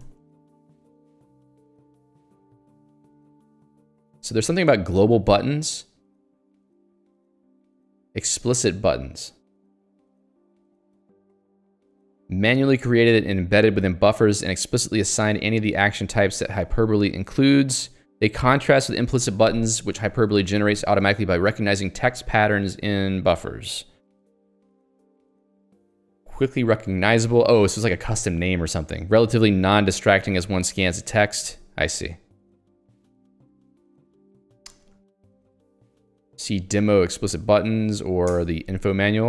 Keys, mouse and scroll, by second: 0.2 ctrl+d, 1.7 ctrl+u, 2.4 ctrl+d, 3.9 ctrl+u, 9.8 j, 13.3 h, 15.7 j, 27.8 l, 29.5 j, 30.2 h, 30.9 i, 31.4 Escape, 31.9 j, 34.2 k, 37.2-39.2 typing, 38.5 alt+Return.